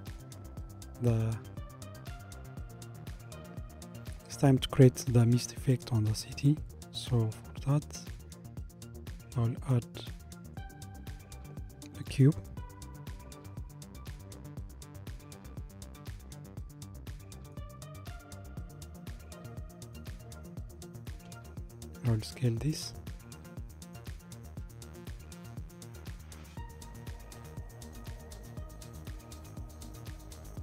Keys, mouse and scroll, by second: 0.8-2.1 middle drag, 2.1-2.8 scroll up 1, 2.8-3.7 scroll up 1, 3.7-5.1 scroll up 1, 6.7-9.0 shift+middle drag, 9.0 click, 10.5 shift+a, 12.6 shift+a, 16.0-21.2 middle drag, 21.2 s, 24.6 KP_1, 27.5 g.